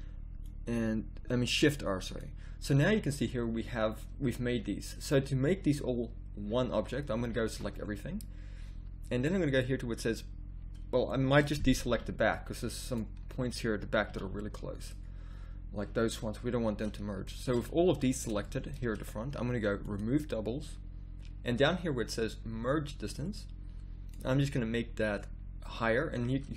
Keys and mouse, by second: 0.5-1.8 drag, 2.6-5.4 middle drag, 6.5 middle click, 7.3 a, 7.5 a, 11.1 middle click, 11.9 b, 13.2 middle click, 14.1 b, 20.0-21.1 drag, 26.4-26.5 middle drag.